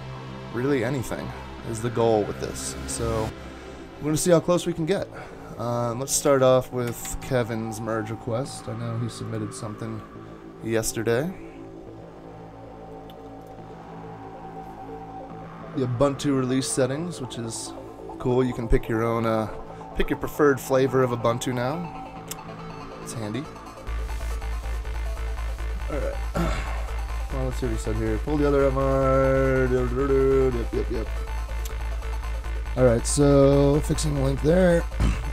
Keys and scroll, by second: 6.3 super+Tab, 6.9 super+Tab, 7.0 super+Tab.